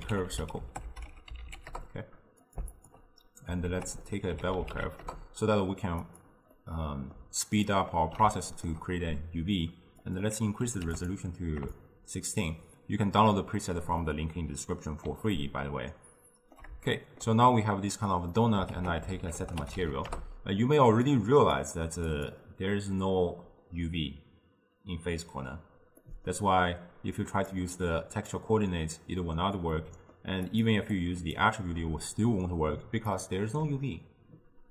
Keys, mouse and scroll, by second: 2.8 alt+shift+click, 3.7 ctrl+a, 6.6-10.1 middle drag, 10.1-11.2 drag, 11.8-14.1 shift+drag, 14.1-17.5 middle drag, 17.5-18.4 scroll up 2, 18.4 middle click, 18.8 ctrl+a, 21.6-24.8 drag, 26.1-27.5 middle drag, 27.5-29.8 drag, 29.8-30.5 middle drag, 30.5 click, 31.0 click, 32.2-34.7 drag.